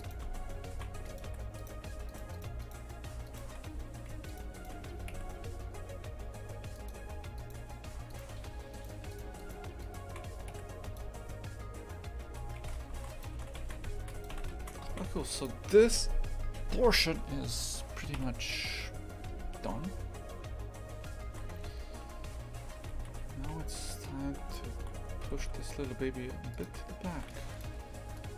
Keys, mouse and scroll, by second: 0.0 right click, 0.2 Tab, 0.7 shift+f, 1.6 right click, 2.1 shift+right click, 2.3 shift+right click, 2.6 shift+right click, 3.3-4.4 shift+right drag, 4.5 right click, 6.9 Delete, 7.4-8.8 right drag, 9.1 shift+right click, 9.4 shift+right click, 9.8-11.0 shift+right drag, 11.0 Delete, 12.2 Tab, 12.6 shift+f, 14.3 a, 14.9 shift+f, 17.5 right click, 18.2 KP_3, 19.5-20.4 scroll up 1, 20.4 scroll up 1, 21.0 shift+middle click, 21.5 Tab, 22.0 a, 22.8 1, 23.2 z, 24.5 shift+click, 25.3 g.